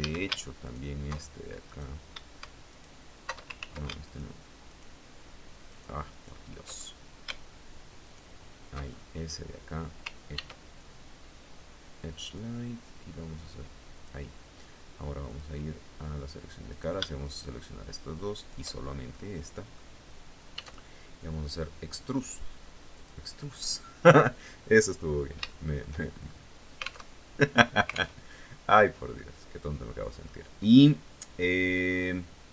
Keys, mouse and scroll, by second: 0.2 alt+shift+right click, 1.2 right click, 2.2 alt+shift+right click, 3.1 ctrl+alt+shift+z, 3.6 ctrl+alt+shift+right click, 4.2 alt+shift+right click, 5.2 alt+shift+right click, 5.7 alt+shift+right click, 6.3 alt+shift+scroll up 1, 7.6 alt+shift+right click, 8.4-8.8 alt+shift+scroll down 1, 9.9 ctrl+e, 11.8 click, 13.5 click, 14.8 click, 16.2 shift+right click, 16.7 shift+right click, 17.9 shift+right click, 18.3-18.6 shift+scroll down 2, 18.7 right click, 20.1 e, 22.5 click, 24.6 scroll down 2, 25.0 shift+right click, 25.6-26.1 shift+scroll up 3, 26.5 alt+Tab, 27.7 alt+Tab, 28.7-29.9 drag.